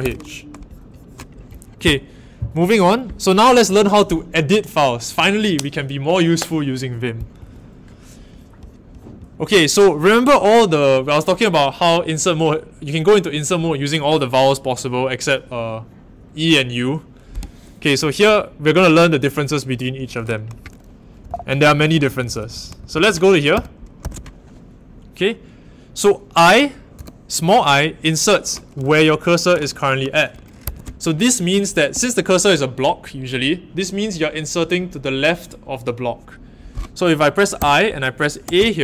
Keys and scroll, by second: 0.0-0.3 typing, 20.9-24.0 typing, 26.9 typing, 30.6 Escape, 31.9 l, 37.5 i, 38.4 a.